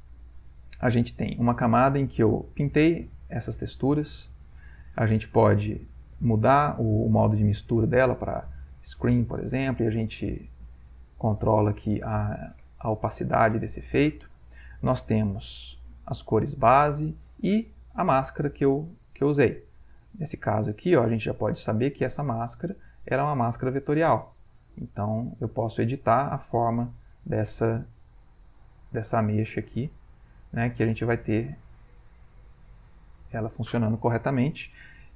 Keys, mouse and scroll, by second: 1.6 click, 2.6 click, 3.1 click, 3.5 click, 3.8 click, 5.1 click, 5.8 click, 8.0 click, 9.5 click, 10.6 click, 11.3 click, 12.0 click, 12.7 click, 13.6 click, 14.9 click, 15.8 click, 16.3 click, 16.7 click, 18.2 click, 18.6 click, 19.6 click, 20.3 click, 22.5 click, 23.5 click, 24.2 click, 25.2-27.3 drag, 29.8 click, 31.1-33.5 drag.